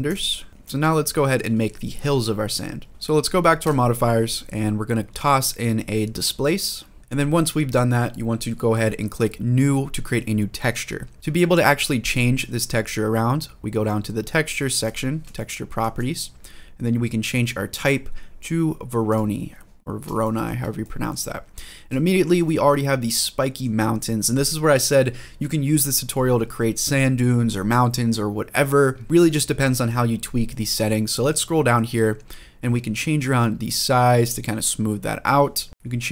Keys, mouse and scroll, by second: 0.5 scroll down 2, 0.7-1.1 shift+middle drag, 2.9 click, 3.4-7.0 drag, 7.0 shift+middle click, 10.4 click, 14.6 click, 15.2-15.6 shift+middle drag, 15.9 scroll up 1, 17.5-18.9 drag, 19.5 scroll down 1, 20.0 shift+middle drag, 20.6 middle click, 21.1-21.4 scroll down 1, 21.4 scroll up 2, 21.8 shift+middle drag, 22.2-23.5 middle drag, 23.6 scroll down 1, 23.9-24.6 scroll up 1, 26.3-26.7 scroll down 1, 29.0 middle click, 30.0-31.8 scroll down 3, 32.8-35.0 drag, 35.7-36.1 drag.